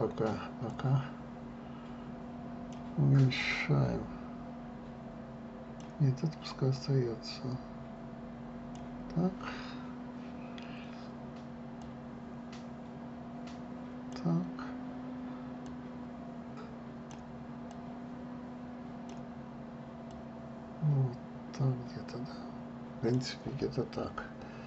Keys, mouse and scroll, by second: 1.4-7.1 drag, 7.4-10.5 drag, 12.5-15.5 drag, 16.4-23.8 drag.